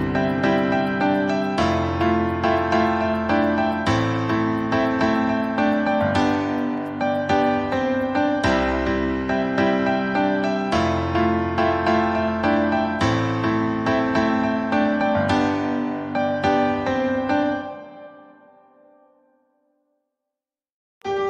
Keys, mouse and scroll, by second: 0.7 middle click, 1.3 scroll down 2, 1.5-3.0 middle drag, 3.0-3.3 scroll up 3, 3.3-4.6 scroll down 1, 4.6-7.4 middle drag, 7.4-14.9 drag, 15.2 middle click, 15.6 scroll up 1, 16.0-17.5 middle drag, 17.5-18.8 drag, 19.9 scroll down 4, 20.0-21.1 middle drag, 21.1 scroll up 3.